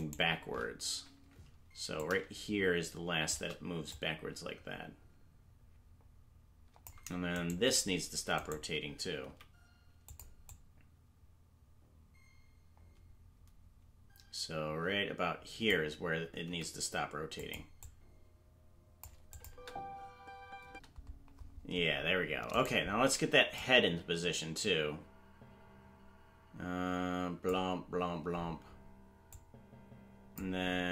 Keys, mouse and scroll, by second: 0.0-0.9 shift+right drag, 1.8 i, 1.9-3.3 drag, 3.9-6.8 drag, 7.5 right click, 10.4-15.6 drag, 10.4 right click, 10.4 g, 17.8-19.0 drag, 17.8 g, 19.3 click, 19.4 space, 22.7 right click, 22.7 space, 23.5-27.1 drag, 29.3 click.